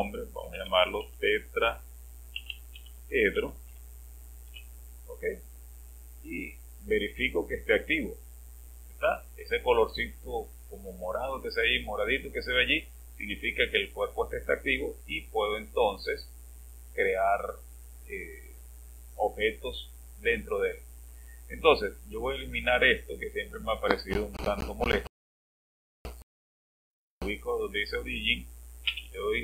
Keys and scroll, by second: 0.3-4.2 typing, 4.5 Return, 28.9 space.